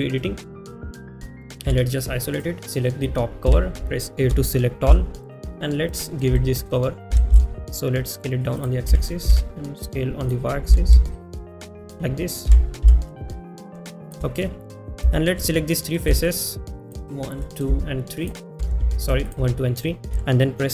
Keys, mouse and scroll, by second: 0.6 middle click, 3.7 a, 5.2 g, 6.4-20.7 shift+middle drag.